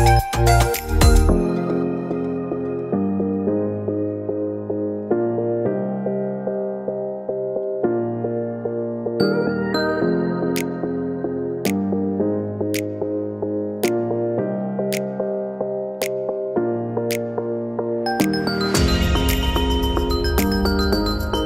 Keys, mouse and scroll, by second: 0.3 ctrl+e, 2.0 middle click, 3.1 alt+a, 3.4 scroll up 1, 3.6 middle click, 4.4 shift+middle click, 4.6 middle click, 6.2 middle click, 11.5 middle click, 12.9 alt+click, 13.7 ctrl+e, 14.9 alt+a, 15.4-15.8 scroll down 3, 15.6 middle click, 17.4 middle click, 17.6 shift+middle click, 18.3 middle click, 18.5 scroll down 2, 19.8 shift+middle click, 20.3 Tab.